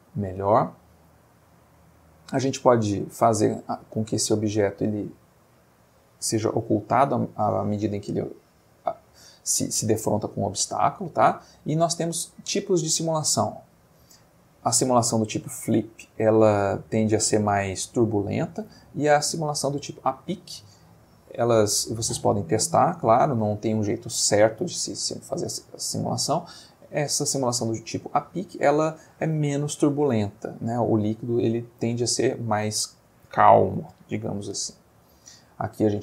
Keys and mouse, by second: 1.2-2.5 middle drag, 10.7-11.5 middle drag, 13.6 click, 20.9 click, 31.7-32.2 middle drag, 35.1 middle click.